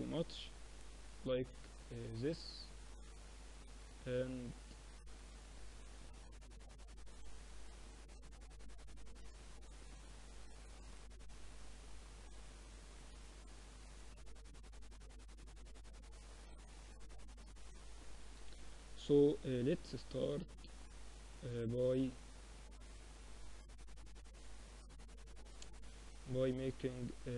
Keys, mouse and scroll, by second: 0.1-1.1 middle drag, 1.1-3.3 drag, 5.7-11.6 middle drag, 10.1 KP_7, 12.4-14.3 drag, 14.1-16.1 middle drag, 16.1 KP_1, 17.5 KP_3, 18.7 z, 19.5-21.9 middle drag.